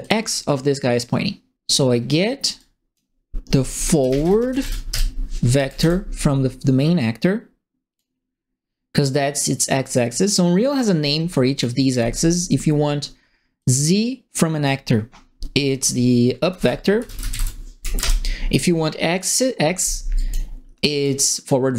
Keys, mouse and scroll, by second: 0.0 click, 2.5 click, 3.7-5.3 typing, 5.5 Up, 5.7 Return, 6.9 click, 11.2 click, 11.9 click, 13.5-14.6 drag, 16.4-17.8 typing, 18.0 Return, 20.1 click, 20.9 click.